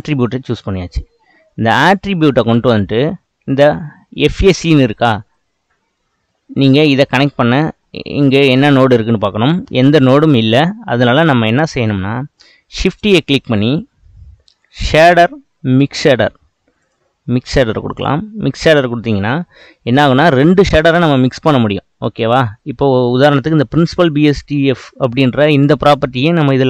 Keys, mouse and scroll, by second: 11.3 click.